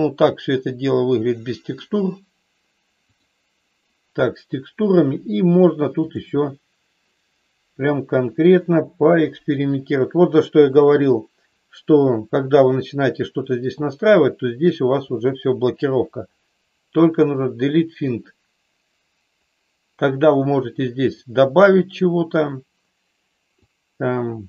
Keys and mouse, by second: 3.1 click, 23.8-24.4 drag.